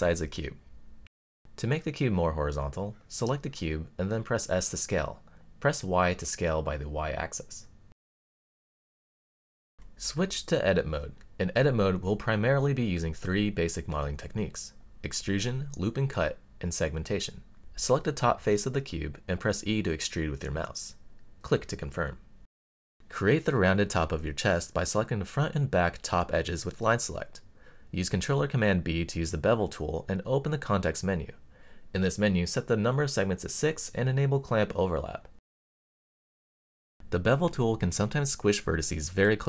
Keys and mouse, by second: 0.1 x, 1.6-2.0 middle drag, 3.0 click, 4.6 click, 5.2 s, 6.2 y, 8.8 click, 9.6-10.7 middle drag, 10.8 click, 12.2 click, 13.4 click, 15.1 click, 16.3 middle click, 17.5 e, 20.0 click, 20.6-22.3 middle drag, 22.4 click, 25.2 click, 26.2 click, 27.7 super+b, 30.7 click, 32.3-33.8 drag, 34.6 click, 35.3 click, 35.8-38.6 middle drag, 38.7 click.